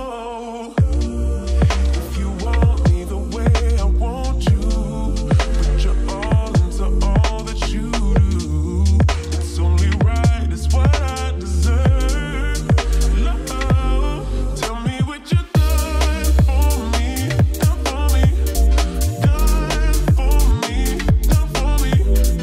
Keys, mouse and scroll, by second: 12.6 right click, 13.7 click, 16.7 click, 18.6-19.4 typing, 20.8-22.4 drag.